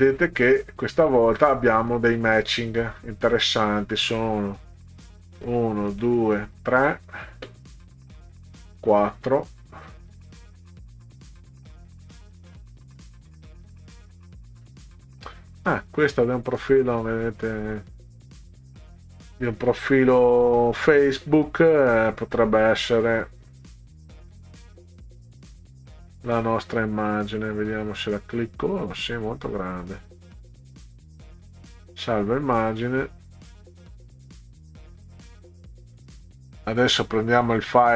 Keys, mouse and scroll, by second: 4.3 right click, 4.9 click, 5.4 right click, 6.0 click, 6.4 right click, 7.1 click, 8.2 right click, 8.9 click, 9.7-10.1 scroll down 4, 10.6 scroll down 2, 11.1 click, 12.2-14.7 scroll down 16, 15.3 scroll up 2, 15.9 scroll up 2, 22.3 right click, 26.2 click, 27.1 click, 29.6 click, 30.6 right click, 31.9 click, 36.8 right click.